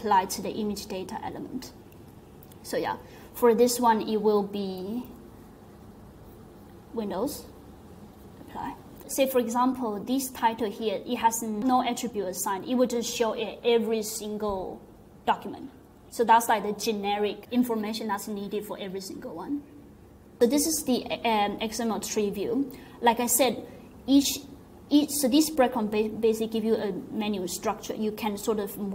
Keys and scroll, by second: 4.7 typing.